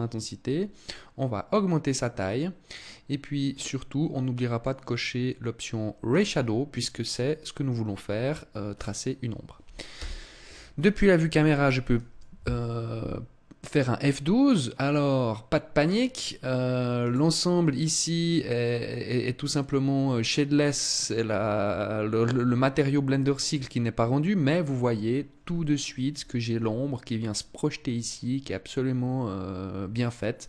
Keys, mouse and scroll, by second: 0.3 click, 2.9 middle click, 5.5 click, 8.1 right click, 9.3 KP_0.